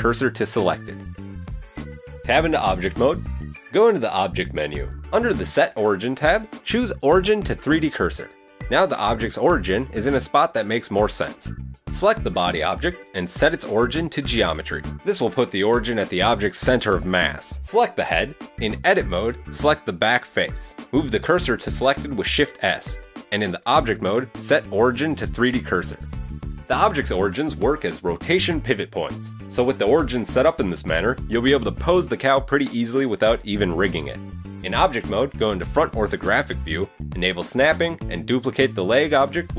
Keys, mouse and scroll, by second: 1.6 scroll up 2, 1.7 middle click, 1.8 middle click, 2.0 Tab, 4.2 click, 7.9-8.6 scroll down 2, 8.3 middle click, 9.1-9.5 scroll down 2, 9.5 shift+middle click, 12.0 right click, 13.6 click, 15.8 shift+middle click, 18.0 right click, 18.7 Tab, 19.2 right click, 20.9 shift+s, 22.1 Tab, 23.0 click, 26.7 scroll down 1, 27.1 shift+middle click, 27.6 right click, 28.0 middle click, 28.6 Tab, 29.5 a, 29.8 Tab, 34.5 KP_1, 34.9-35.5 scroll up 1, 35.5-36.0 scroll up 2, 36.0-36.4 scroll down 2, 36.6 shift+d, 38.0 click, 38.9 g.